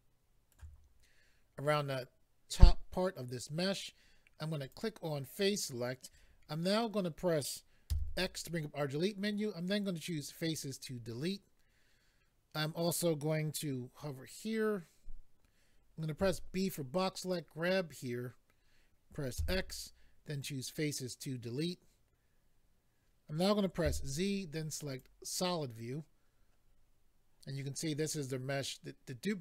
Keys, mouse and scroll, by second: 4.6 click, 4.7 click, 10.0 click, 10.1 click, 16.6 click, 16.6 b, 20.4 click, 20.4 x, 20.5 click, 24.9 click, 24.9 z, 26.6-27.7 scroll up 2.